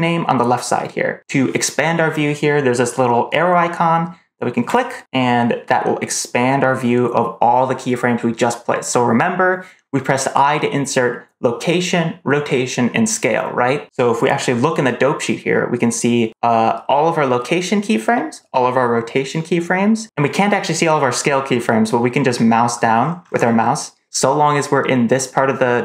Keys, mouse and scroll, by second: 4.6 click, 22.4-22.9 scroll down 5, 22.9 scroll up 2, 23.1 scroll down 2, 23.3 scroll up 1, 23.5-25.0 scroll down 1, 25.0-25.7 scroll down 1, 25.7 scroll up 1.